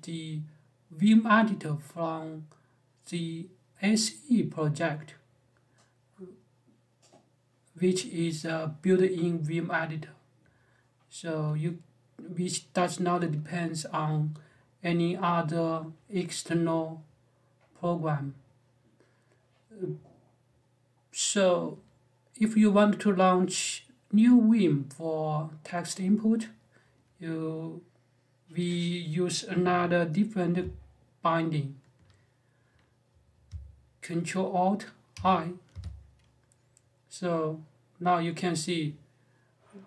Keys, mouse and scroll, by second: 34.9 ctrl+alt+i.